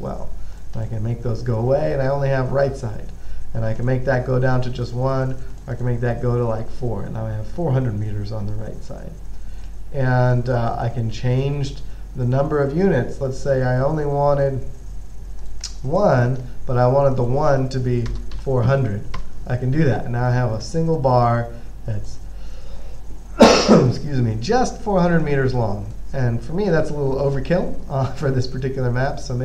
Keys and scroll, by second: 18.7 4, 19.4 Return, 20.4 typing.